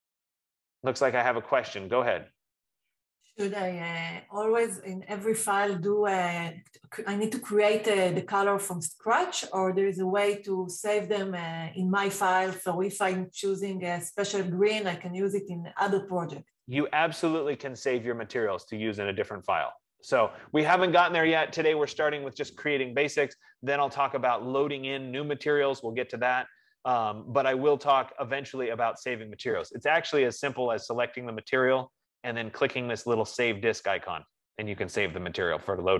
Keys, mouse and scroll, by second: 1.1 F15.